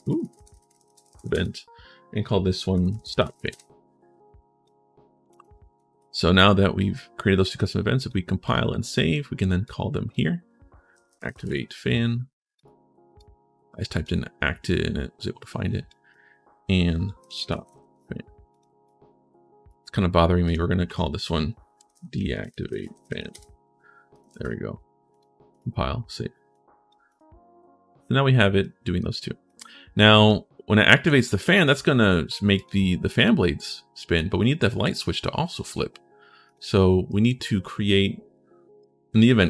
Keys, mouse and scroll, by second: 0.6 space, 2.5 s, 2.8 space, 3.1 a, 4.4 click, 5.5 right click, 5.9 click, 7.7 click, 8.2 click, 8.6 right click, 9.4 click, 10.5-11.7 typing, 12.3 click, 12.9 click, 15.6 click, 16.7-18.0 typing, 18.3 click, 18.6 click, 20.2 click, 21.7-23.3 typing, 23.9 click, 24.1 ctrl+shift+s, 24.9 click, 25.3 click, 26.3 click, 26.9 click, 28.4 right click, 28.9 right click, 30.6 right click, 32.3 click, 35.4 click, 36.2 click, 36.9 right click.